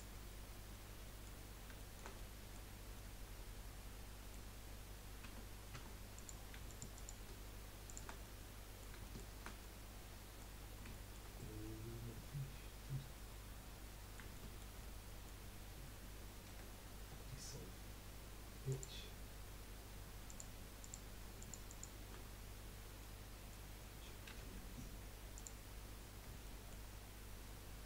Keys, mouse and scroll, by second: 0.5 scroll down 4, 0.7 middle click, 1.8-4.5 shift+middle drag, 4.5 scroll up 1, 4.7 scroll down 1, 5.4 Tab, 5.9 Tab, 6.2 click, 6.7 alt+shift+click, 6.9 alt+shift+click, 7.8 alt+shift+click, 8.2-10.6 middle drag, 10.6-10.9 scroll up 2, 10.9 shift+middle click, 11.3 scroll up 2, 11.7-16.4 middle drag, 16.4 Delete, 20.3 click, 20.8 click, 21.4 alt+shift+click, 23.0-24.3 middle drag, 24.3 1, 25.3 click, 26.4-27.8 shift+middle drag.